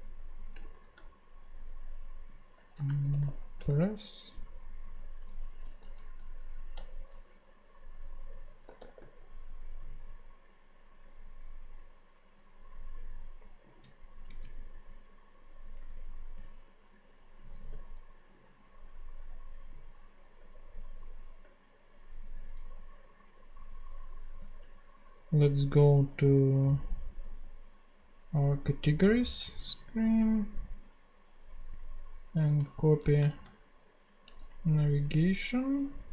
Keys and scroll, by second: 0.0-0.6 typing, 2.6-3.6 typing, 5.4-6.2 typing, 6.8 Return, 8.5-9.5 typing, 15.9 ctrl+Tab, 17.6 super+v, 20.4 Tab, 33.0 shift+super+Left, 33.3 shift+super+c, 34.3 super+c, 34.4 ctrl+super+Tab.